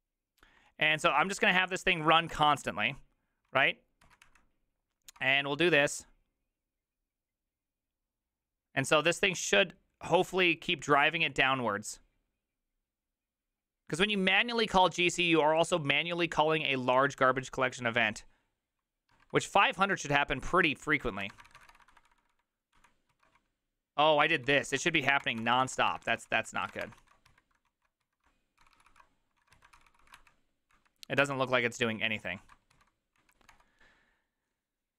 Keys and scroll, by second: 0.4-1.2 typing, 1.2 ctrl+c, 2.3 Return, 4.1 ctrl+a, 4.1 4, 4.2 Up, 5.2 Return, 20.5 alt++, 20.5 alt+{, 21.1-22.1 typing, 22.3 ctrl+d, 23.1 ctrl+d, 23.1 ctrl+u, 23.4-28.5 typing, 27.7 ctrl+a, 28.6 ctrl+c, 28.7 ctrl+c, 28.9 ctrl+c, 29.4 ctrl+a, 29.5 3, 29.7 ctrl+c, 30.0 ctrl+c, 30.2 Up, 30.7 Up, 31.2 Return, 32.4 ctrl+a, 32.7 4, 33.2 Up, 33.5 Return.